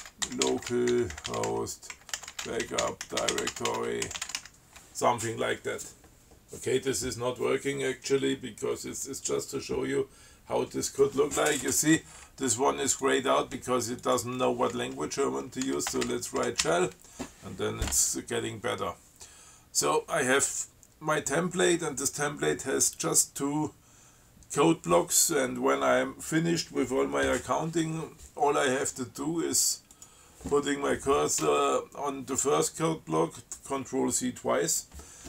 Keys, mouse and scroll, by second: 0.0-5.1 typing, 13.1 click, 14.3 click, 15.7-17.1 typing, 30.2 click.